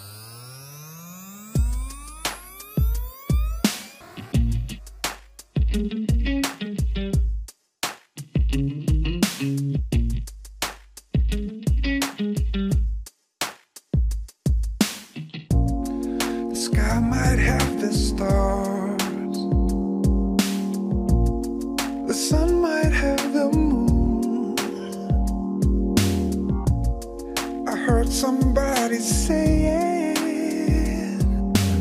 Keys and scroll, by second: 1.4 Escape, 1.6 alt+Return, 4.2 alt+Return, 4.7 ctrl+shift+s, 9.6 ctrl+r.